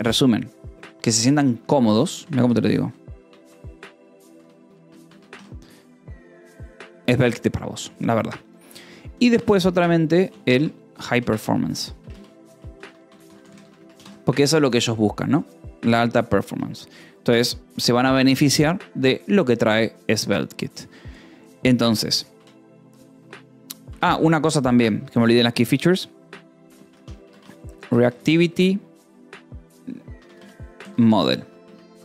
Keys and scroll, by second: 1.4-5.9 typing, 5.8 ctrl+s, 8.9-9.7 typing, 10.9-14.0 typing, 14.5 ctrl+s, 22.3 Return, 23.8 Escape, 24.0 k, 25.5-32.0 typing.